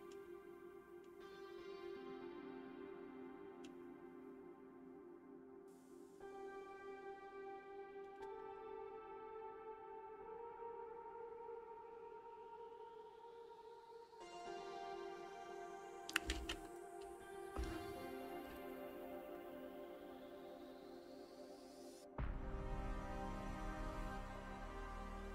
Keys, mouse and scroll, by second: 8.4-11.4 middle drag, 13.6 alt+shift+z, 14.1 alt+shift+z, 14.4-15.7 shift+middle drag, 15.7 Tab, 16.3 alt+x, 16.7 click, 17.0 alt+x, 17.2 middle click, 18.2 ctrl+shift+click, 18.7 alt+middle click, 19.1 shift+middle click, 19.3 scroll up 4, 20.7 e, 22.7 alt+s.